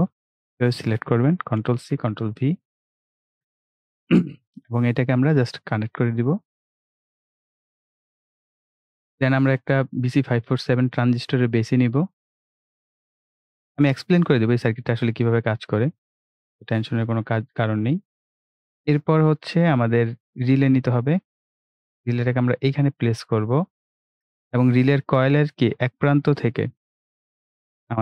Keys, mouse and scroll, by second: 1.6 ctrl+c, 1.8 ctrl+v, 3.3 click, 3.8 right click, 4.6 click, 8.5 right click, 9.8-15.2 drag, 18.1-18.4 ctrl+scroll down 1, 20.4-23.5 drag, 23.9-24.5 ctrl+scroll up 3, 25.8-28.0 drag.